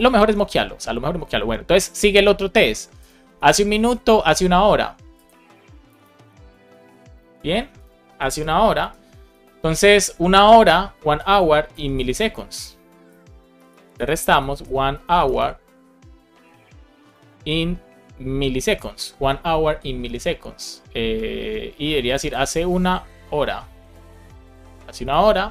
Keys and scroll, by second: 3.2 super+c, 5.8 Return, 6.2 Up, 6.6 super+v, 7.2 super+s, 8.1 alt+shift+f, 8.6 super+z, 8.7 super+s, 13.5-15.8 typing, 17.0 Return, 19.7 super+Caps_Lock, 19.9 super+s, 22.9-24.1 typing, 25.0 super+s.